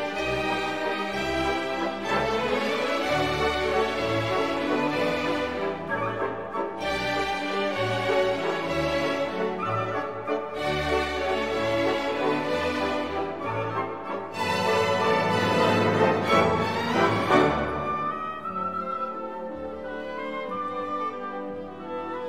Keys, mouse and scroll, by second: 5.1 -, 5.6 y, 6.3 0, 9.0 click, 11.0 0, 14.9 click, 18.2 scroll down 2.